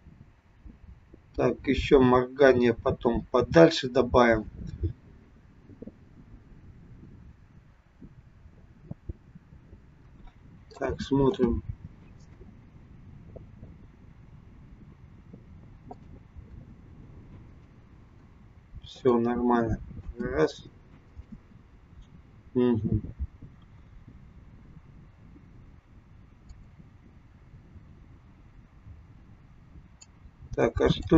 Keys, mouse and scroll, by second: 11.3 space, 12.3 space, 16.0 click, 16.4 space, 18.3 space, 19.1 click, 20.0 space, 21.4 space, 26.6 click, 30.0 click.